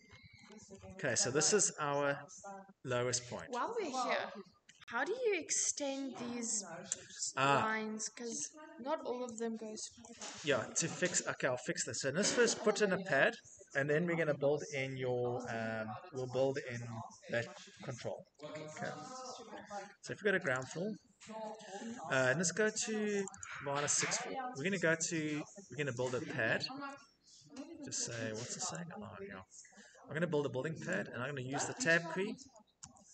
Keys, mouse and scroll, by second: 2.7-4.6 scroll, 4.6-6.7 scroll, 8.2 scroll, 9.3 click, 10.1 Escape, 20.4 click, 20.6 click, 21.5 middle click, 23.2 click, 23.3 click, 25.9 click, 28.7 click, 30.8 click, 32.3 Tab, 32.7 Tab.